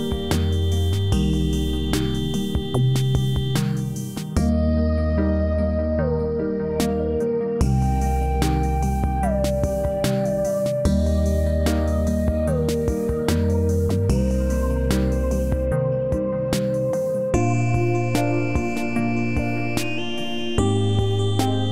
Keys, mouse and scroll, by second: 4.9 click, 5.3 scroll up 1, 6.6-7.6 alt+middle drag.